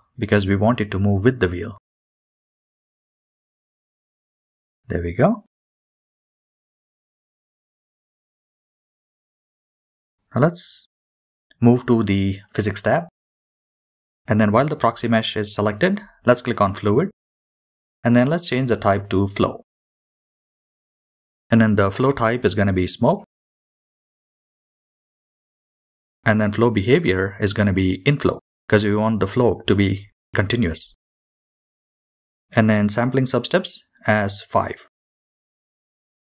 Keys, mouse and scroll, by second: 2.8 click, 4.1 middle click, 4.2 g, 7.0-7.9 middle drag, 7.9-8.7 scroll up 3, 9.0 click, 9.8-10.7 middle drag, 12.2 click, 16.2 click, 17.7-22.1 drag, 27.0-28.2 drag, 28.8-32.1 scroll down 2, 33.2-35.2 drag, 35.7-36.2 scroll down 2.